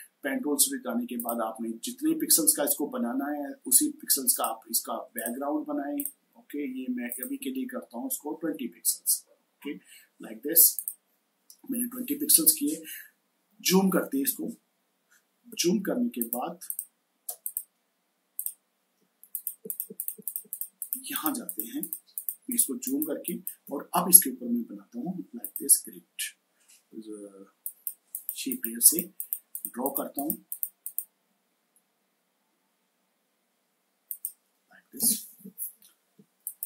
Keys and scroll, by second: 8.1 2, 9.4 0, 13.3 ctrl+=, 13.6 ctrl+=, 13.7 ctrl+=, 14.1 ctrl+=, 18.9 space, 26.7 space, 36.0 space.